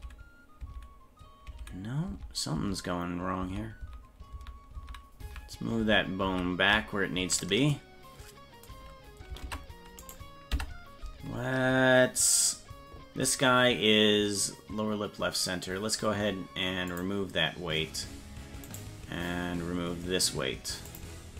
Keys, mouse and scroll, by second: 0.0 ctrl+z, 0.8 ctrl+z, 1.6 ctrl+z, 2.2 ctrl+z, 2.7 ctrl+z, 3.5 ctrl+z, 3.9 ctrl+z, 4.4 ctrl+z, 4.9 ctrl+z, 5.4 ctrl+z, 5.9 ctrl+z, 6.4 ctrl+z, 9.5 ctrl+Tab, 10.1 right click, 10.6 Tab, 17.0 click, 18.8 right click, 20.9 click.